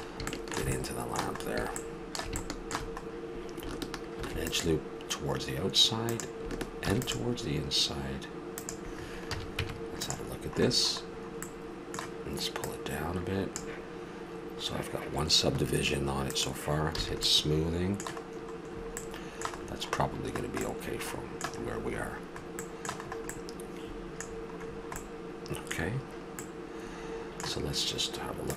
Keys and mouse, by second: 1.4 middle click, 2.8-4.1 middle drag, 4.1 ctrl+r, 6.8 ctrl+r, 9.3 a, 9.6 Tab, 12.6 click, 13.3-15.7 drag, 16.3 click, 17.0 a, 18.2 middle click, 19.0 middle click, 21.3-21.9 middle drag, 25.1 middle click, 25.3-28.3 middle drag.